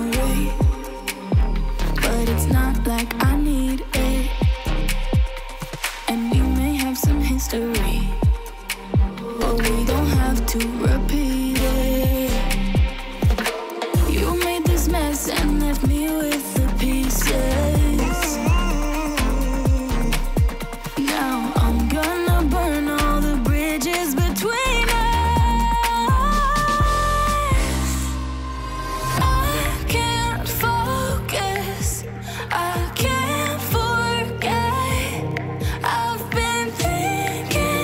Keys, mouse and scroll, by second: 3.6 Return, 3.9 ctrl+0, 15.4 Return, 20.9 Return, 35.1 Return.